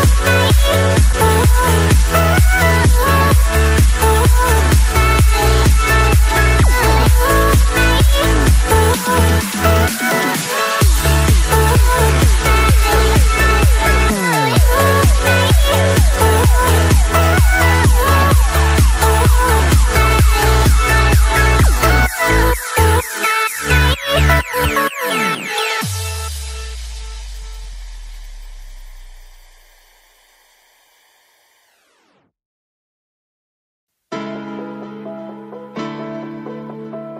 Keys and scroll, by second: 23.0 ctrl+j, 24.2 ctrl+t, 29.5 Return.